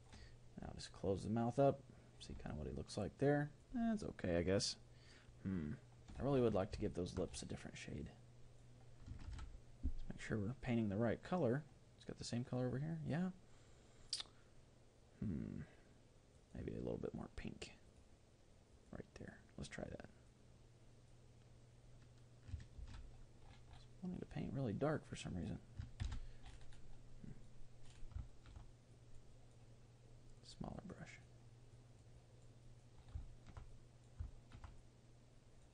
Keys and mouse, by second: 0.9-2.9 drag, 2.5-5.6 middle drag, 6.8-8.6 middle drag, 8.1-9.8 drag, 9.4 ctrl+z, 11.2-14.4 drag, 16.3-18.8 drag, 20.3-22.0 drag, 23.2 ctrl+z, 24.2-25.9 drag, 26.4 ctrl+z, 27.3-28.3 drag, 28.3-30.0 middle drag, 30.0-35.7 drag, 33.2-35.7 middle drag.